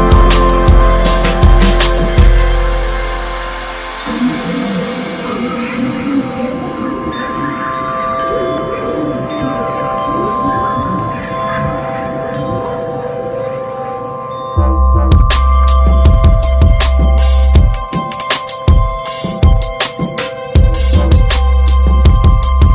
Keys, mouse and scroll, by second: 0.6 click, 0.9-1.2 scroll down 2, 1.2-1.7 middle drag, 1.7 a, 3.1 alt+middle click, 3.3-3.7 alt+scroll up 3, 3.5 shift+middle click, 4.0 s, 4.9 click, 6.9 alt+z, 7.0 click, 7.2 middle drag, 7.5 alt+z, 7.9 shift+middle click, 8.0 scroll up 2, 8.2-8.8 middle drag, 8.8 scroll up 1, 9.0-9.8 shift+middle drag, 9.8 ctrl+s, 10.0 click, 10.3-10.7 shift+middle drag, 10.7 scroll up 1, 11.5 h, 11.8-12.7 middle drag, 12.7 scroll up 4, 13.2 scroll down 3, 13.4-14.2 middle drag, 14.2 shift+scroll up 1, 14.8 click, 15.2 `, 15.5-18.6 middle drag, 18.6-19.3 drag, 19.3 ctrl+z, 20.8-22.7 drag.